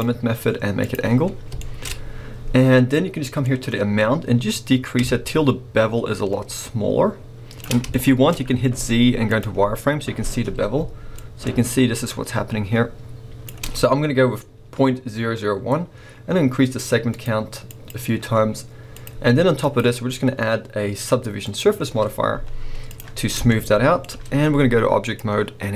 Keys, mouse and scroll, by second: 1.6-3.4 shift+middle drag, 1.9-3.4 scroll up 2, 3.4-7.9 drag, 7.9-11.2 shift+middle drag, 8.3 scroll up 1, 8.7 z, 11.2-21.6 shift+drag, 22.2 scroll down 1, 22.3 z, 23.5-25.0 shift+middle drag, 25.0-25.7 drag.